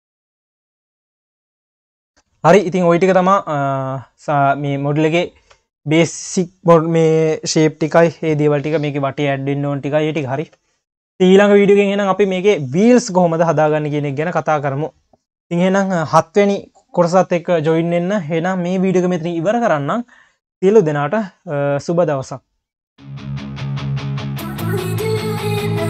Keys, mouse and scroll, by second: 0.0 click, 1.0 ctrl+s, 1.8 scroll down 1, 2.0 q, 2.4 ctrl+s, 2.6 scroll up 1, 2.7 q, 3.3 q, 4.8 scroll down 1, 5.2 q, 8.7 q, 10.5 ctrl+s, 10.8-12.2 scroll down 1, 12.2 q, 14.3 ctrl+s.